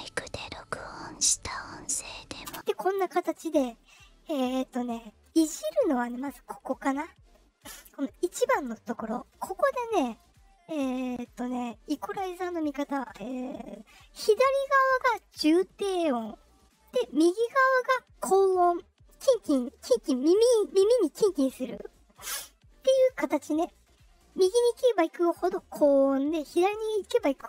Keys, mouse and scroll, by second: 2.4 space, 6.1-11.9 drag.